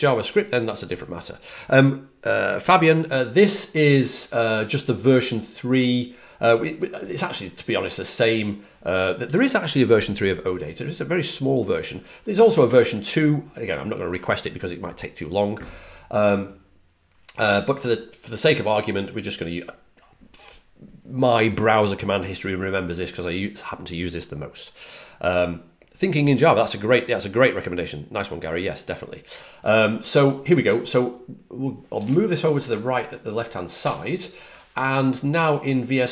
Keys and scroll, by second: 33.7 alt+super+Left.